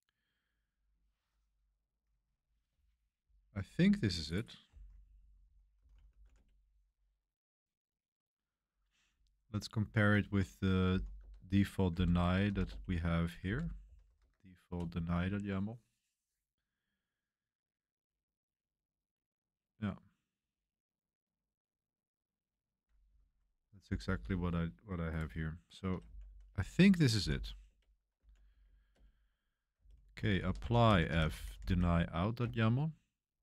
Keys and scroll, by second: 3.2 typing, 4.6-6.7 typing, 9.8 super+3, 10.9-14.5 typing, 14.7 Return, 23.1 super+1, 25.8-32.4 typing, 32.4 Return.